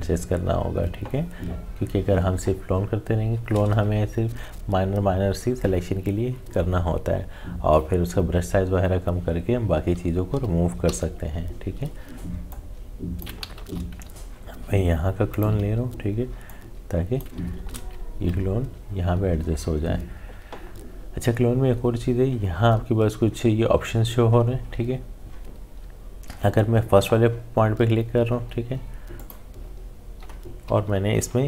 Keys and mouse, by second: 10.8 e, 12.5 click, 13.6 ctrl+z, 15.3 alt+click, 17.5 ctrl+z, 29.2 click, 30.7 typing.